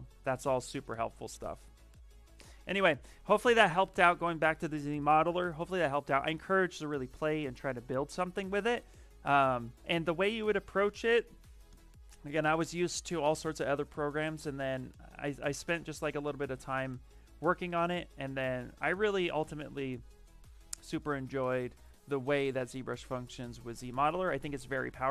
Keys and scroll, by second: 9.7 v, 14.8 s, 16.9 shift+f, 18.0 shift+f, 21.3 shift+f, 21.7 shift+d.